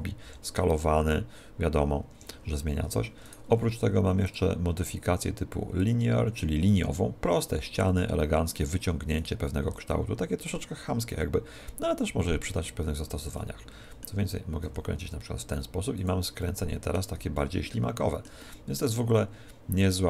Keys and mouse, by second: 3.3 right click, 4.3 click, 9.2 right click, 9.7 click, 13.4-15.1 middle drag, 14.7 r, 16.1 click, 16.5 middle click, 16.7-20.0 middle drag.